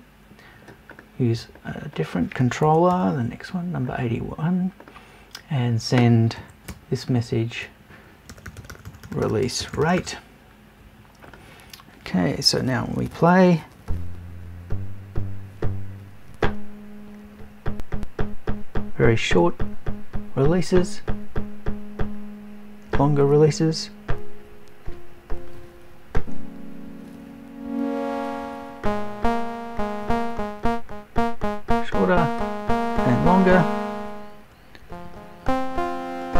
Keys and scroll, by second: 2.7 BackSpace, 6.4 Right, 6.7 BackSpace.